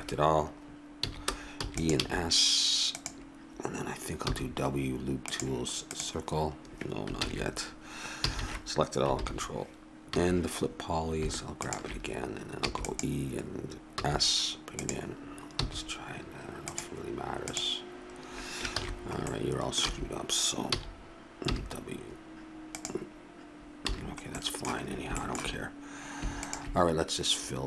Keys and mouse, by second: 1.0 a, 1.5 e, 1.9 s, 4.3 w, 7.2 ctrl+z, 8.2 a, 8.4 a, 9.1 ctrl+n, 10.1 a, 12.6 e, 13.9 s, 15.6 w, 18.7 ctrl+z, 19.9 a, 20.7 a, 21.5 w, 23.9 a.